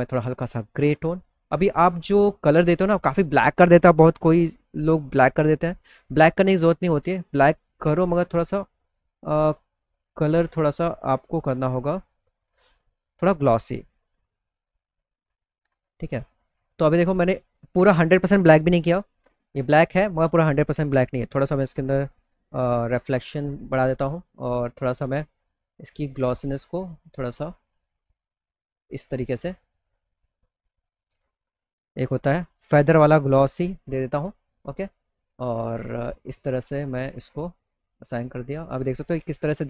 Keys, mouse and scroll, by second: 5.0 click, 6.4 click, 7.2 click, 8.7 click, 10.1-11.7 drag, 12.5-14.4 drag, 15.0 click, 16.8 click, 16.9 click, 18.3 click, 19.3 click, 20.5-21.8 drag, 22.3 click, 23.1 click, 23.4 click, 23.5 right click, 25.0-29.0 drag, 25.0-28.0 right drag, 29.5 click, 29.6 click, 33.7 click, 35.3 click, 36.1 click, 36.6 middle click, 36.9 alt+middle click, 37.4 click, 37.7 middle click, 38.0-39.4 alt+middle drag, 39.5 middle click.